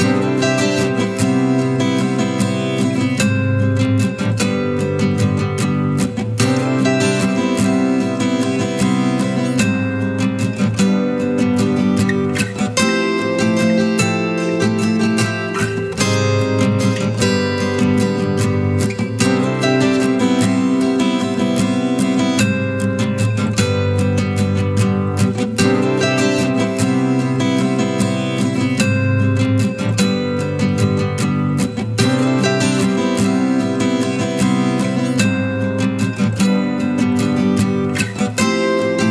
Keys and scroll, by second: 4.5 ctrl+d, 4.8 ctrl+space.